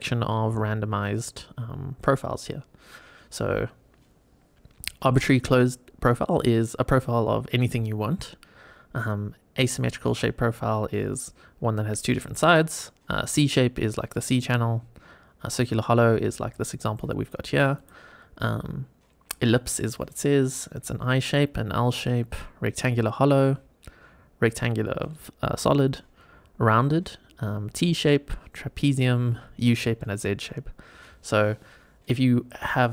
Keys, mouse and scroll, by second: 17.7-32.9 drag.